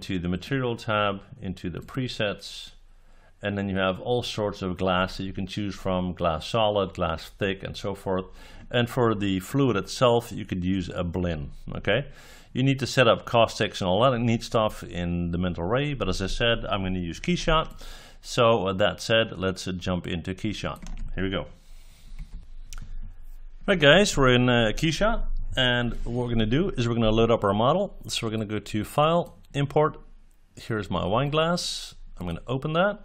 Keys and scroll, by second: 22.1 F9.